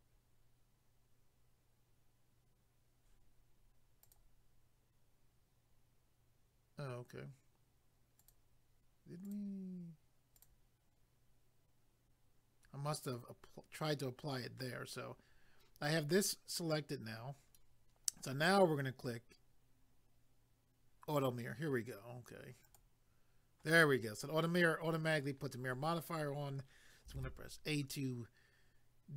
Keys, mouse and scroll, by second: 4.0 click, 8.2 click, 9.2 click, 10.3 click, 22.6 click, 27.2 a.